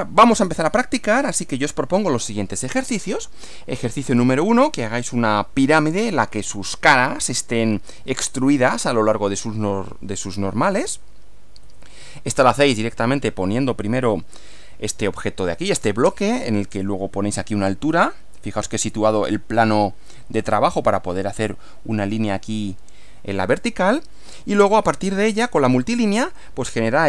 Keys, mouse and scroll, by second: 1.6 click, 11.6 Right, 26.1 Right.